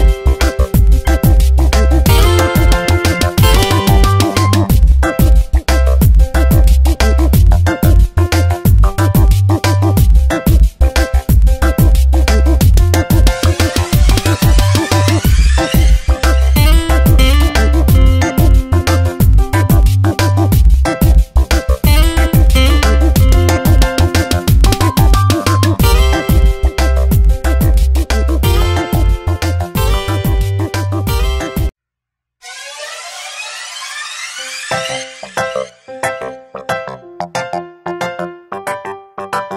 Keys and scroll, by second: 4.8 v, 6.4 Tab, 9.1 ctrl+z, 9.5 Tab, 12.4 ctrl+z, 15.6 shift+Up, 16.1 shift+Down, 18.5 ctrl+z, 24.0 Tab, 24.9 space, 30.2 Tab, 31.9 ctrl+z, 34.9 ctrl+z.